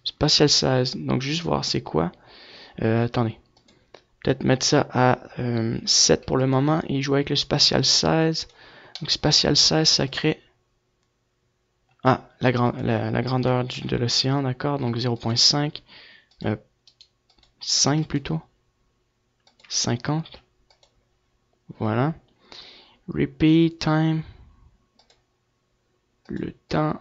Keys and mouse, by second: 2.1-4.5 drag, 5.4-8.9 drag, 9.5-11.3 drag, 12.6 right click, 12.7 click, 13.1 right click, 20.4-23.4 drag, 26.9-27.0 drag.